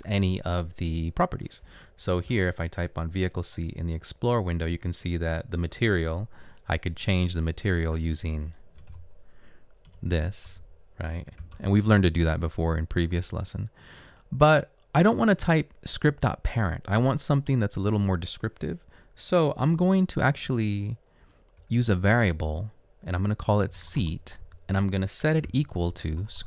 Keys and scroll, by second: 8.9 m, 9.5 m, 9.9 Return, 10.5 space, 11.4 =, 11.5 space, 20.0 BackSpace, 20.5 BackSpace, 21.3 BackSpace, 21.9 BackSpace, 23.5-26.4 typing.